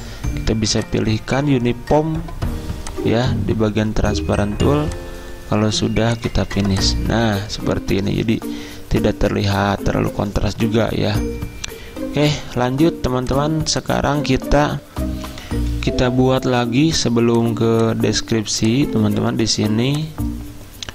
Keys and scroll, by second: 14.9 F10, 16.1 z, 18.6 z.